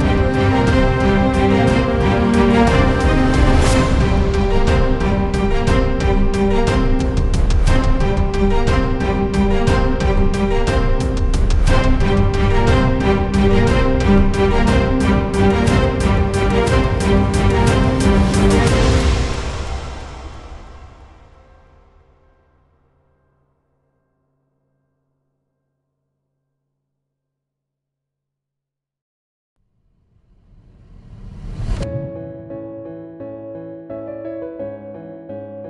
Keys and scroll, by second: 13.5-18.9 typing, 26.3-28.6 typing, 28.8 Return, 31.3-32.4 typing, 32.5 Return.